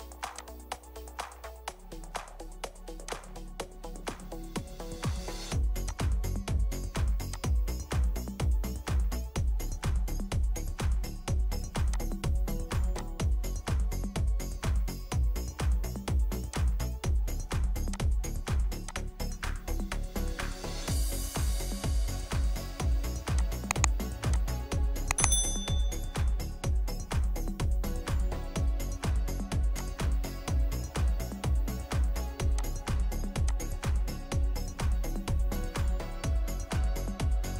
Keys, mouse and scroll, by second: 4.5-6.0 scroll up 1, 7.6-8.5 scroll up 1, 8.5 middle click, 9.3 scroll down 1, 9.3 scroll up 1, 9.5 scroll down 1, 10.6 right click, 20.7 right click, 33.8-34.5 scroll up 1, 34.5 scroll down 1, 34.9 scroll up 1, 37.5 right click.